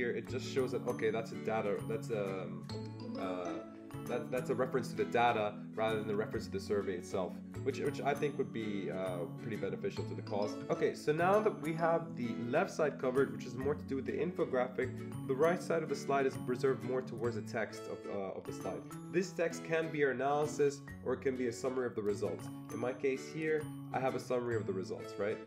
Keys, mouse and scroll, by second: 23.3 click.